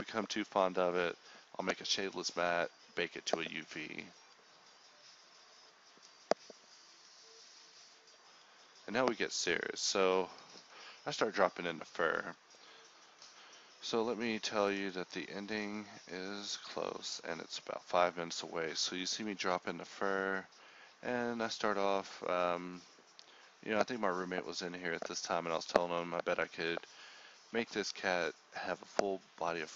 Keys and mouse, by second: 0.6-1.7 drag, 3.1 click, 4.4-5.6 drag, 6.0 KP_0, 11.8 KP_1, 14.5-16.6 drag, 17.5-20.6 drag, 21.1-23.6 drag, 24.6 click, 24.9 KP_0.